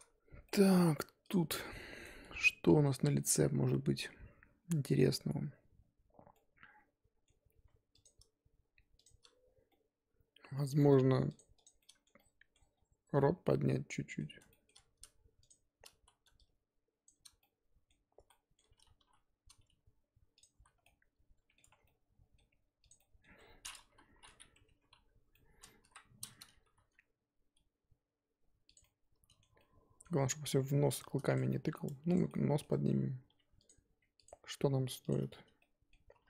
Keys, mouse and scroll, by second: 0.4 middle click, 1.3 click, 1.4 Tab, 1.6-8.0 middle drag, 8.0 click, 9.0 shift+click, 9.7-11.3 middle drag, 11.5 shift+click, 11.8 shift+middle click, 12.7 scroll down 2, 13.1-14.7 middle drag, 14.7-15.4 scroll up 1, 15.4 shift+click, 16.0 z, 17.0 shift+click, 17.4 middle click, 18.2 z, 18.3 middle click, 19.0 g, 20.6 z, 20.8 scroll down 1, 20.8 middle click, 21.6 Tab, 21.7 scroll down 1, 21.8-22.9 middle drag, 22.9 click, 22.9 middle click, 23.6-24.0 scroll up 1, 24.0 KP_3, 24.4 scroll up 2, 24.6 Tab, 24.9 a, 25.3 middle click, 25.8 KP_1, 26.0 scroll up 1, 26.6 g, 28.8-30.3 middle drag, 30.3 g, 31.3 middle click, 31.8 Tab, 32.1 click, 32.3 middle click, 32.7 Tab, 33.3 2, 33.6 click, 34.2 shift+click, 35.1 shift+click, 35.2 scroll up 1, 35.3 scroll down 2, 35.6 middle click, 36.1 g.